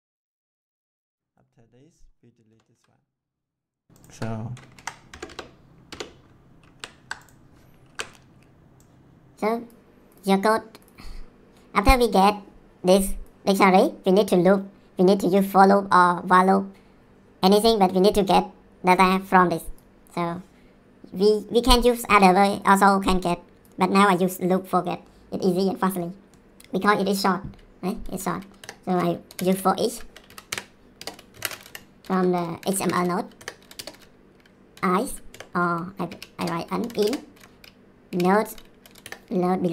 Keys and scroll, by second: 0.1 ctrl+c, 1.0 ctrl+v, 2.5 BackSpace, 2.7 Delete, 4.7 Up, 5.1 BackSpace, 6.6 ctrl+s, 7.8 ctrl+s, 28.6 Return, 29.0-29.9 typing, 30.2 Down, 30.5 Return, 30.9-38.7 typing, 39.0 Return.